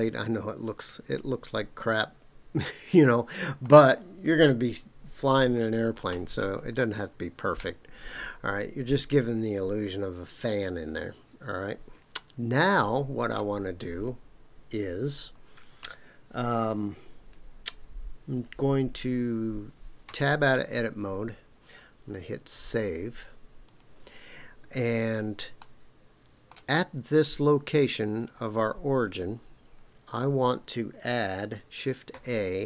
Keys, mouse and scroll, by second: 3.9-5.3 scroll down 4, 5.3-6.7 scroll up 7, 6.7-13.4 middle drag, 20.1 Tab, 22.5-23.8 drag, 25.6-26.5 middle drag, 32.1 shift+a.